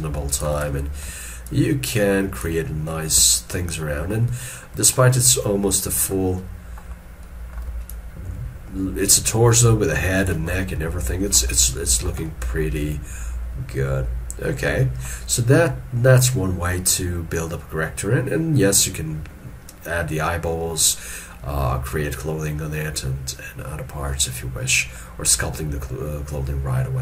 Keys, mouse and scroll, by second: 0.8 middle click, 1.6 shift+click, 3.6 shift+middle click, 3.6 click, 4.5 alt+middle click, 6.4 scroll down 1, 6.5 middle click, 7.1 scroll down 1, 7.3 middle click, 8.0 shift+click, 10.6 scroll down 1, 11.7 shift+middle click, 12.3 middle click, 15.5 scroll up 1, 23.8-24.9 scroll down 1, 25.0 shift+scroll down 1.